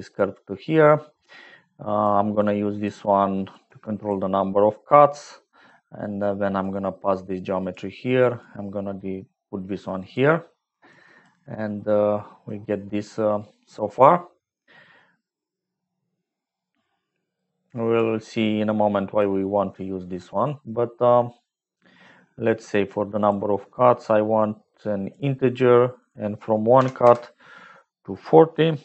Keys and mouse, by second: 1.7 click, 2.3 click, 3.4 click, 5.3 middle click, 6.6-7.6 drag, 8.5-10.0 drag, 10.9 click, 11.7 middle click, 17.4 click, 18.4-19.4 drag, 23.3-25.1 drag, 26.8-27.8 drag, 28.0-28.8 drag.